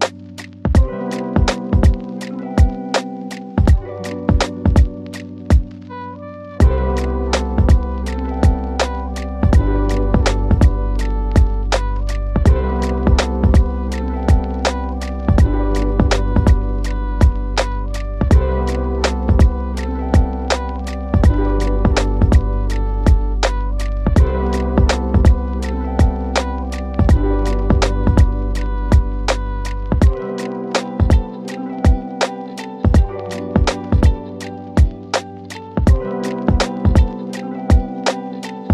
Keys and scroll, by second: 0.8 shift+Home, 1.0 Caps_Lock, 1.9-4.2 typing, 15.3-18.8 typing, 18.0 Return, 20.4-30.8 typing, 28.7 Return, 34.3 ctrl+z, 36.8 F2, 37.2 Escape, 37.8 F4, 38.1 Escape.